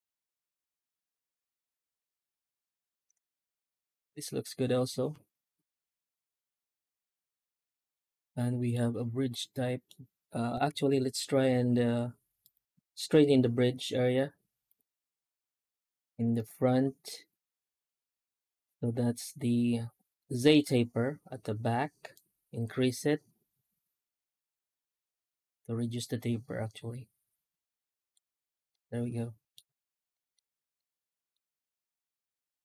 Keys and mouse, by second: 3.2-3.5 middle drag, 3.7-7.8 middle drag, 8.1-8.6 middle drag, 9.4-9.7 middle drag, 10.5 F9, 28.6 middle click, 30.0 middle click, 30.6 middle click, 30.9 middle click, 31.5 F9.